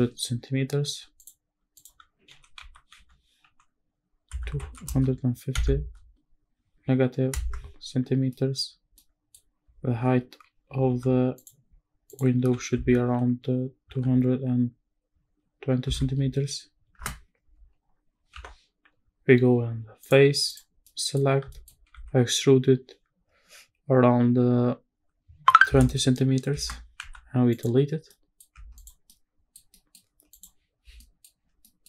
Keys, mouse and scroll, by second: 0.9 ctrl+r, 1.7 click, 2.3 g, 2.6 x, 3.0 y, 4.3 KP_2, 4.6 KP_5, 4.8 KP_0, 5.5 KP_Subtract, 7.3 KP_Enter, 8.0 scroll down 1, 8.3 middle click, 8.6-9.0 scroll up 2, 9.0 middle click, 9.8 ctrl+t, 10.8 ctrl+r, 12.1 click, 12.4 g, 12.7 z, 13.9 KP_2, 15.8 KP_2, 16.0 KP_0, 17.0 KP_Enter, 18.3 3, 20.0 click, 20.5 click, 20.8 middle click, 21.2 scroll up 1, 21.5 shift+middle click, 21.9 e, 25.7 KP_2, 25.8 KP_0, 26.5 KP_Enter, 27.0 x, 28.1 middle click, 28.5 Tab, 28.7 click, 29.1-29.5 middle drag, 29.7 scroll down 1, 29.7 middle drag, 30.3 click, 31.0 middle drag, 31.4 scroll down 1, 31.6 middle drag.